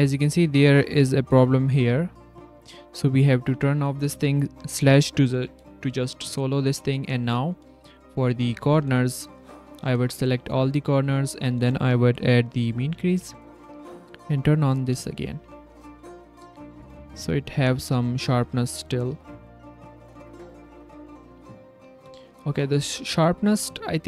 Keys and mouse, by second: 0.0 click, 1.4 click, 1.7 click, 3.3 click, 3.5 Tab, 4.7 /, 5.3 Tab, 5.6 s, 5.7 click, 6.6 click, 7.0 click, 7.2 s, 7.3 shift+click, 7.7 s, 8.3 click, 8.9 ctrl+s, 9.2 ctrl+click, 9.4 ctrl+s, 9.6 click, 10.0 ctrl+s, 10.4-11.5 drag, 12.4 click, 14.2 click, 14.6 drag, 16.5 click, 16.7 Tab, 17.2 z, 17.9 drag, 18.2 z, 18.8 g, 19.4 Tab, 20.7 /, 21.4 drag, 22.1 drag.